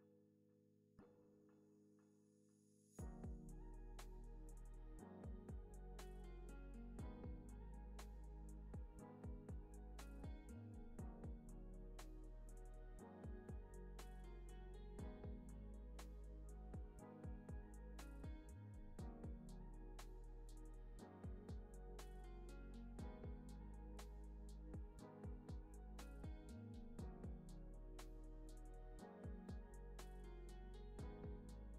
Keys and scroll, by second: 5.1 Left, 11.9 super+s, 17.6 F9, 20.0 F9, 22.2 F9, 24.3 F9, 28.7 F9, 30.9 Delete.